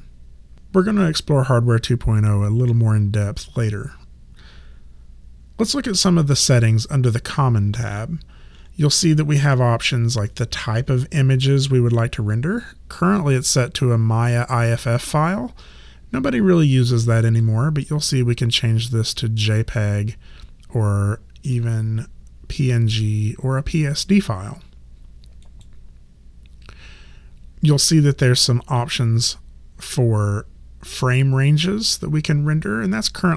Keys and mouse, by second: 17.2 click, 25.4 click.